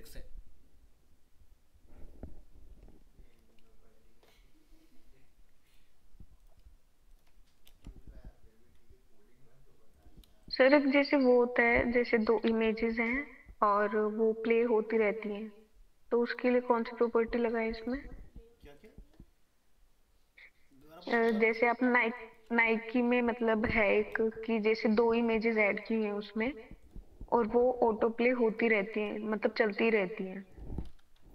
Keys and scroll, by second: 7.7 ctrl+c, 24.1 ctrl+v, 29.0 alt+Tab.